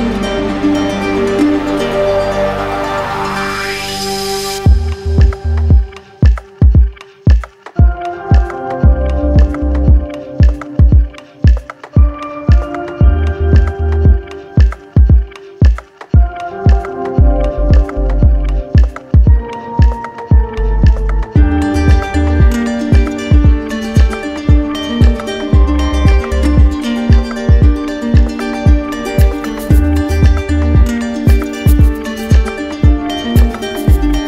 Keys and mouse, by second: 0.4 click, 4.3 click, 5.2 click, 5.9 alt+click, 8.5 ctrl+click, 9.0 ctrl+click, 9.4 w, 11.3 click, 12.4 click, 13.0 alt+click, 19.7 click, 20.1 ctrl+click, 23.2 click, 24.4 click, 25.7-26.8 drag, 27.8-28.8 drag, 31.2-32.3 drag.